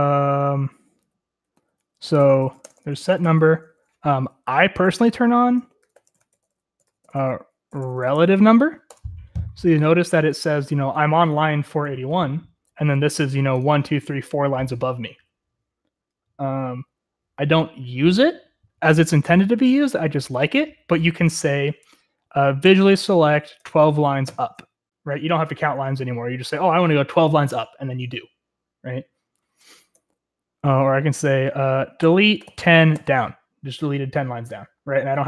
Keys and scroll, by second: 0.9-9.4 typing, 22.7-24.8 typing, 30.0 Escape, 31.8-33.5 typing.